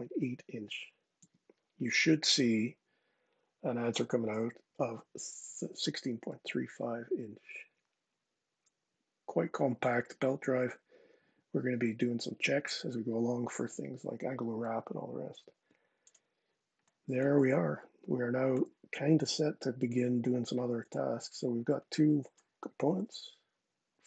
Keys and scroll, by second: 0.9 Tab, 22.5 super+z.